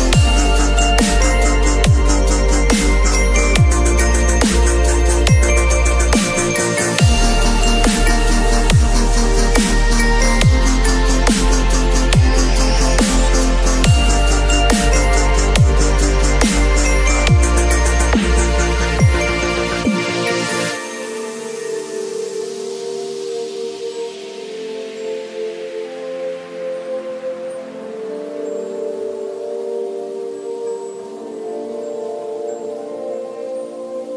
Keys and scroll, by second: 1.8 space, 7.3 b, 8.7 ], 10.2 [, 12.1 ], 17.0 b, 21.6 v, 25.1 ctrl+t, 31.0 space, 31.6 ctrl+a, 31.8 ctrl+c, 32.2 ctrl+w.